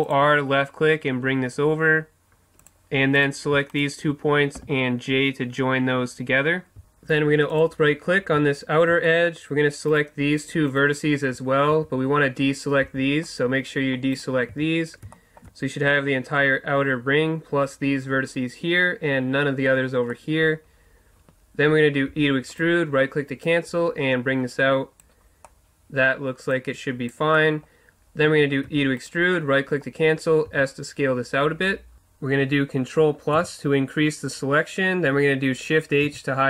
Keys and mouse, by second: 2.7 click, 3.4 right click, 4.6 j, 7.5-9.1 right drag, 9.1-11.7 middle drag, 11.7 right click, 11.7 z, 12.8 c, 14.5 z, 14.9-16.0 right drag, 20.1-22.6 middle drag, 22.1 e, 22.6-24.2 drag, 23.5 right click, 24.4 click, 25.2 middle click, 26.5 click, 27.1-28.5 middle drag, 28.7 e, 29.0 click, 29.4-30.6 right drag, 30.6-31.9 drag, 30.6 s, 33.3 ctrl+KP_Add, 36.0 shift+h.